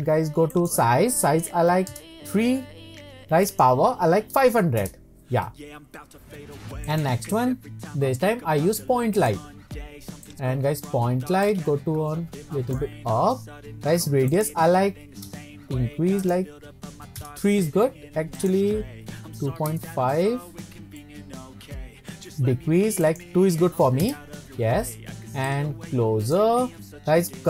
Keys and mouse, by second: 0.5-1.8 drag, 1.8-2.9 right drag, 3.5-5.4 drag, 4.5 KP_0, 6.9-9.3 drag, 10.3 click, 11.5-12.8 drag, 14.3-15.4 drag, 15.4-20.1 right drag, 20.1 middle click, 21.0-22.3 middle drag, 23.2-24.7 drag, 25.6 click.